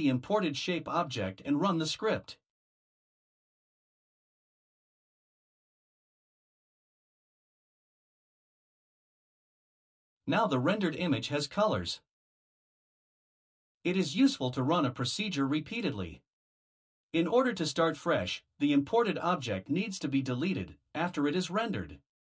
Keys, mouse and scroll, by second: 0.1 click, 1.3 click, 2.8 Delete, 8.4 click, 13.3 click, 16.5 click, 17.3 Return, 17.6 Return, 19.4-22.3 typing.